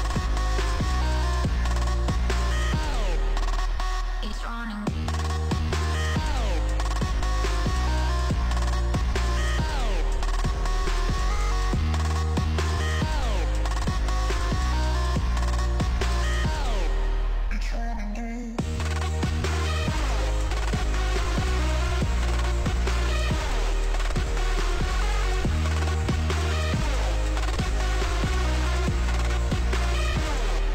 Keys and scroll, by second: 19.0 s, 25.3 c, 28.9 space.